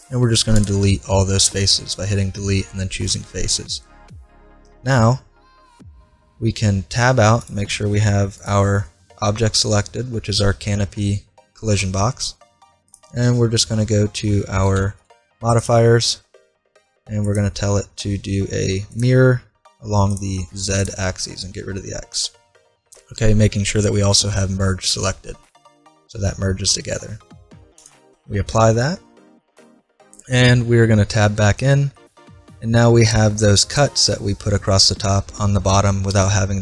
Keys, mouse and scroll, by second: 1.2-2.8 middle drag, 5.3 Tab, 7.4-11.4 right drag, 12.9-14.7 drag, 15.6-19.0 drag, 20.1-22.4 drag, 21.8-23.5 middle drag, 27.8 click, 31.0 Tab, 31.9-36.6 middle drag.